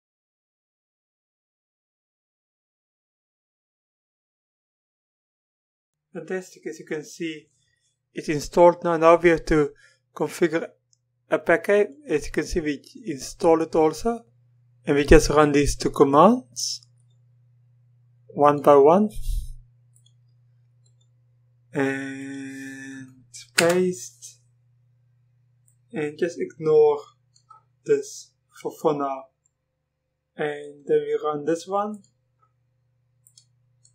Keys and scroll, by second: 23.6 Return.